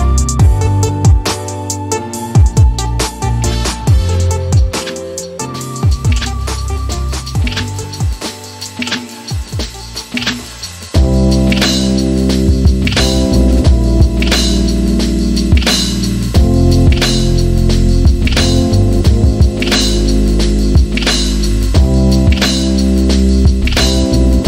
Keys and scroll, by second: 3.3 e, 9.8-11.0 typing, 15.2 p, 16.3 Return, 20.4 1, 22.7-24.3 typing.